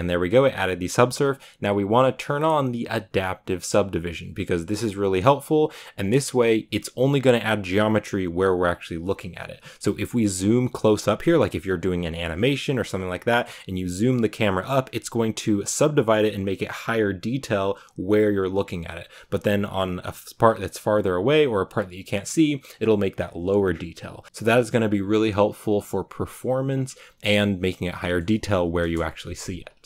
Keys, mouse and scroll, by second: 5.0 click, 5.9-7.5 scroll down 2, 10.1-10.6 scroll up 1, 10.6-11.0 scroll up 1, 11.0-27.7 middle drag, 27.7 scroll down 1, 27.9 middle click, 28.7 KP_0, 29.8 shift+middle click.